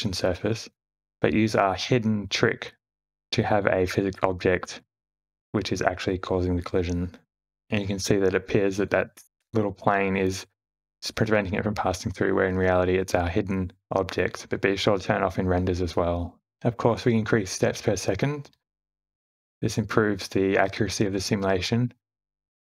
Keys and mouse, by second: 0.2 Tab, 1.2 a, 2.8 e, 3.3 Tab, 4.9 h, 5.5 click, 6.3 q, 7.5 space, 8.5 click, 10.9 `, 12.7 space, 13.9 click, 16.9 click, 20.2 space, 22.2 space.